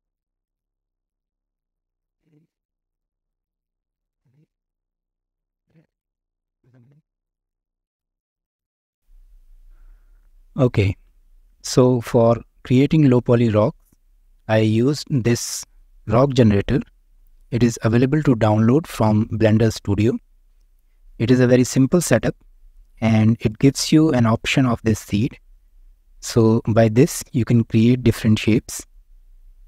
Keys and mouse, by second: 0.5 shift+middle click, 1.2 Tab, 1.4 click, 1.9 shift+click, 2.6-3.2 middle drag, 3.4-3.8 shift+middle drag, 4.5 middle click, 5.4-5.9 shift+middle drag, 6.9-7.3 middle drag, 7.5-7.9 shift+drag, 8.0 click, 8.4 Tab, 8.9 click, 13.1 shift+click, 13.1 shift+middle drag, 13.4 middle click, 14.5 click, 16.3-16.7 middle drag, 17.3 shift+middle click, 21.0 middle click, 22.0-23.2 middle drag, 23.7 middle click, 25.5 click, 26.6 click, 27.6 click, 28.8 click.